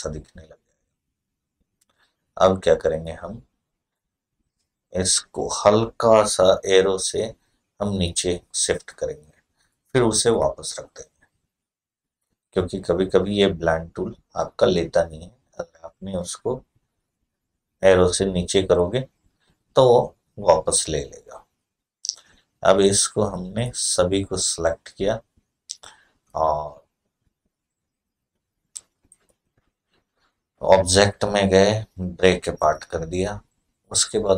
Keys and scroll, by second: 7.7 Down, 10.1 Up.